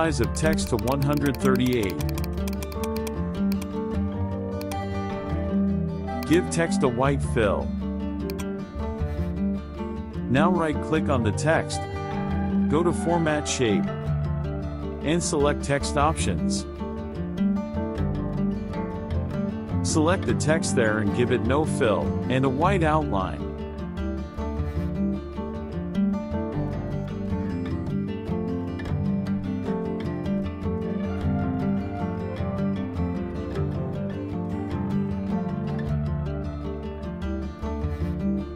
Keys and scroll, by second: 9.6 KP_Subtract, 14.1 KP_Subtract, 21.9 KP_Subtract, 30.4 KP_Subtract.